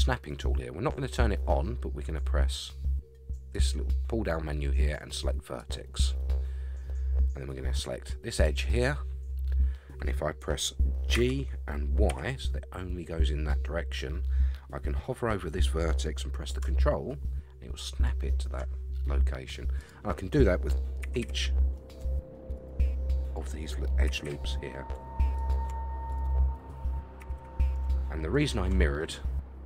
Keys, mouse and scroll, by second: 3.5-6.5 drag, 8.4 click, 11.1 g, 19.8 click, 21.0 g, 23.2 click, 24.1 g, 26.1 click, 27.2 g, 29.0-29.6 middle drag.